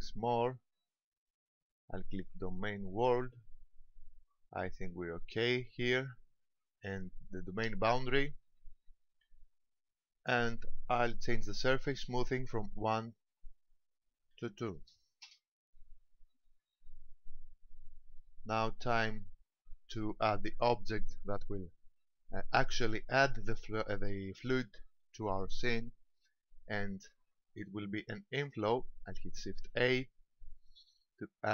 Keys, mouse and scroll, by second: 1.2 click, 2.8 middle click, 5.9 click, 8.4 click, 13.0 click, 18.1 shift+middle click, 29.7 shift+a.